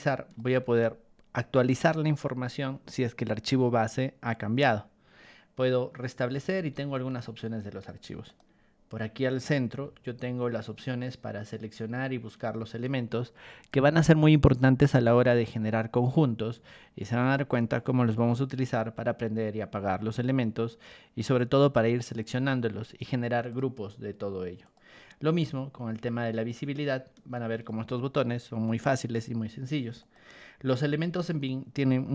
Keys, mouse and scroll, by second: 6.3 r, 6.9 ctrl+click, 8.2 right click, 9.3 click, 9.8 g, 11.0-12.4 ctrl+drag, 23.5 right click, 24.6 click, 25.3 r, 26.5-27.6 ctrl+drag, 29.0 right click, 30.0 click, 30.7 g.